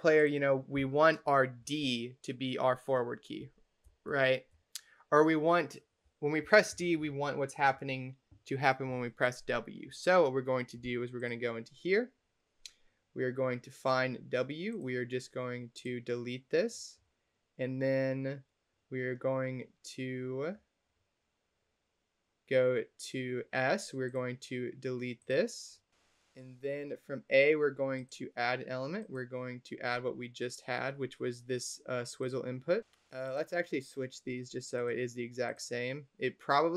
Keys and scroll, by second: 1.7 d, 3.7 d, 4.4 a, 6.3 d.